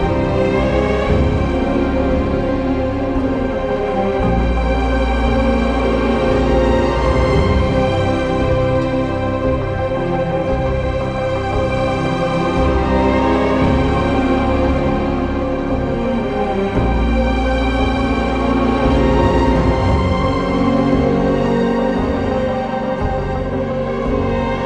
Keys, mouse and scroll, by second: 0.5 ctrl+z, 11.0 ctrl+z, 11.1 ctrl+s, 12.2 click, 13.4-14.7 typing, 17.7 ctrl+z, 18.7 ctrl+z, 22.1 ctrl+z, 22.3 e, 23.5 click.